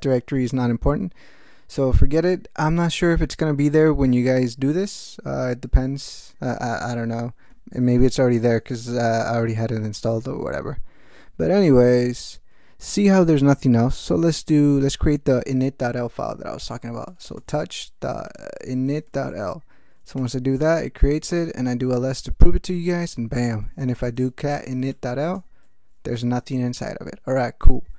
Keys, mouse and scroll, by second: 16.8-19.6 typing, 20.2 Return, 21.0-21.8 typing, 21.9 Return, 23.5-25.3 typing, 25.3 Return, 27.6 ctrl+d.